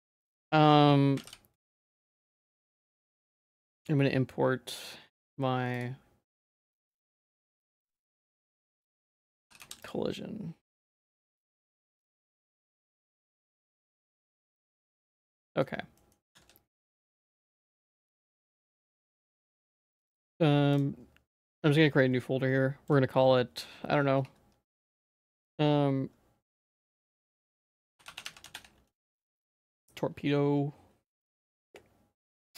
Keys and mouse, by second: 1.2 a, 1.8-3.6 drag, 1.8 x, 15.4 middle click, 16.0 middle click, 16.4 ctrl+s.